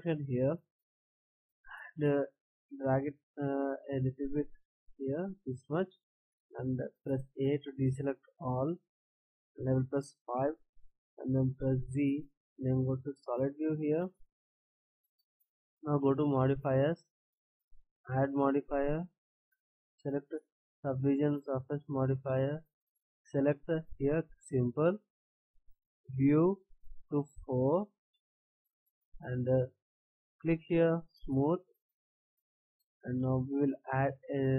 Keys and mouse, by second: 2.7-4.6 drag, 5.8 click, 7.2 a, 11.7 z, 13.5 middle click, 13.9 middle drag, 14.2 middle click, 16.9-20.4 drag, 24.4-29.0 drag, 30.8-32.0 drag.